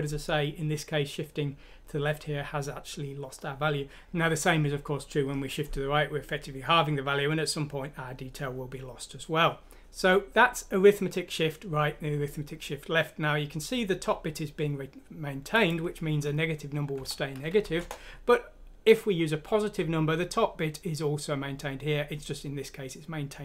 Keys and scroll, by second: 17.0 Delete, 17.6 F6, 17.8 Return.